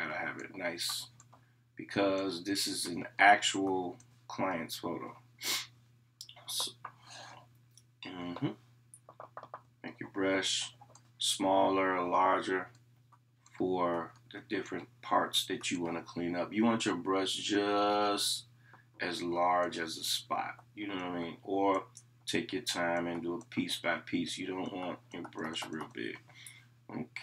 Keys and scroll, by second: 9.1 [.